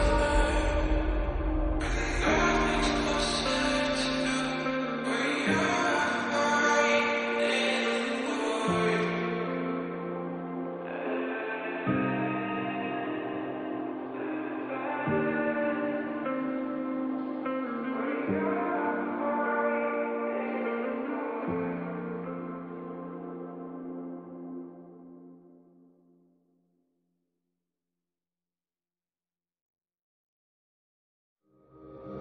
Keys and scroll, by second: 0.6 [, 3.4 [, 4.9 [, 8.4 [, 8.8 [, 10.6 [, 12.8 [.